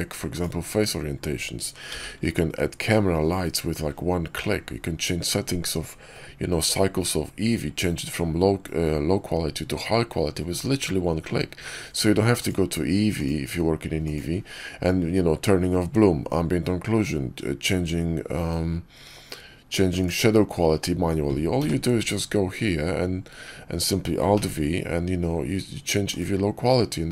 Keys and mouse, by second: 1.8 alt+v, 12.2 click, 13.1-14.1 drag, 19.8 click, 21.5 q, 24.2 alt+v.